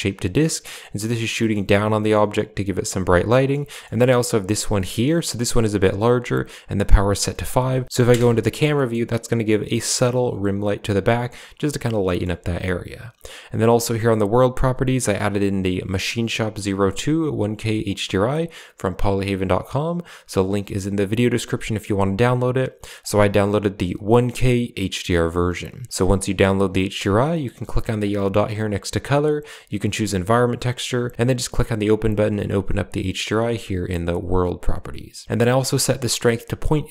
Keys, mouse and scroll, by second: 0.1 middle drag, 1.2 middle drag, 3.3 middle click, 3.6 shift+middle drag, 7.8 KP_Decimal, 8.0 KP_Decimal, 8.0 KP_0, 8.8 shift+middle drag, 12.1 shift+middle click, 13.8 click, 17.3-19.3 drag, 22.9-25.2 drag, 27.9-31.3 drag.